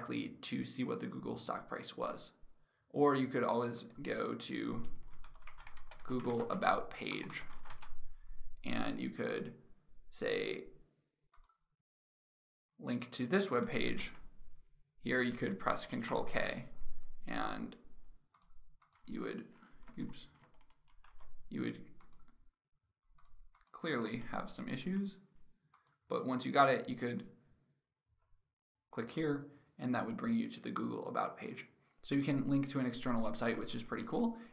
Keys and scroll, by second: 13.2 ctrl+c, 13.5 alt+Tab, 15.8 ctrl+k, 19.5 ctrl+a, 20.8 ctrl+v, 23.7 ctrl+a, 24.5 ctrl+v, 26.6 ctrl+v, 33.5 alt+Tab.